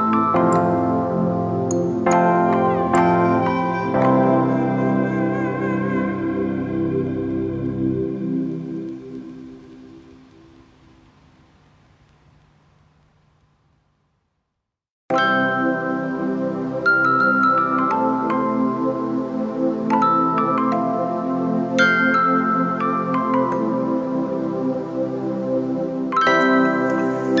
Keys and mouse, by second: 0.5 click, 2.3 ctrl+click, 2.7 ctrl+t, 3.5 click, 5.5-14.8 drag, 14.8 Up, 18.0 click, 18.7 click, 24.5 click, 25.2 shift+click.